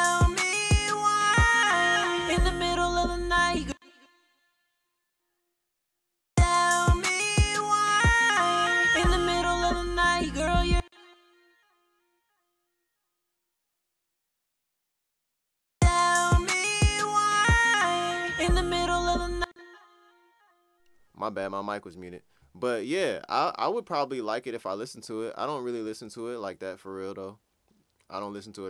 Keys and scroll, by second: 3.0 space, 5.7 space.